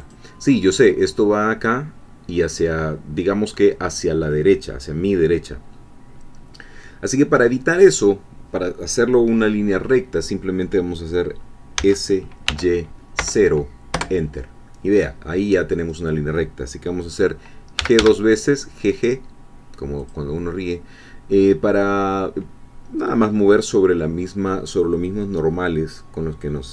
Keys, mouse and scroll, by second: 0.0-11.8 drag, 11.8 s, 12.5 y, 13.2 0, 13.9 Return, 17.8 g, 20.0-22.9 drag.